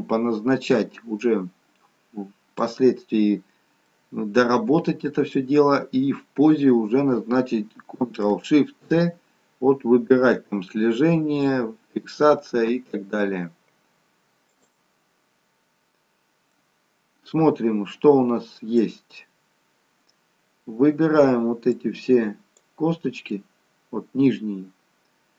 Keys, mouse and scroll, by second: 1.2 middle click, 3.0-3.8 scroll down 1, 3.8 middle click, 11.4 ctrl+shift+c, 16.6 middle click, 19.4-20.3 scroll down 1, 21.7 click, 23.4 middle click.